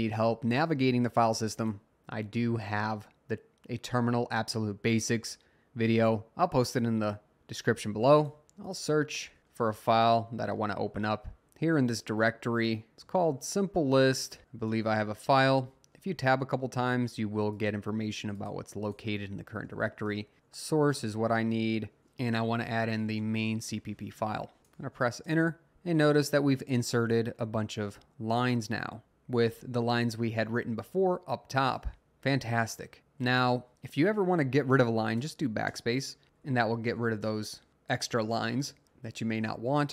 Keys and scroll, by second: 11.4 …, 12.9 s, 13.0 Tab, 14.7 Tab, 14.9 Tab, 19.4-21.5 typing, 22.5-23.6 typing, 25.2 Return, 26.3 Up, 26.8 Up, 27.5 Up, 29.3 Up, 29.4 Down, 30.4-31.0 Down, 32.0 Down, 32.5-32.8 Down, 33.0 Up, 33.3 Up, 33.7 Down, 35.2 BackSpace, 35.7 …, 35.7-36.2 BackSpace, 36.4 Down, 37.0 BackSpace, 38.4 Down, 38.6 Down.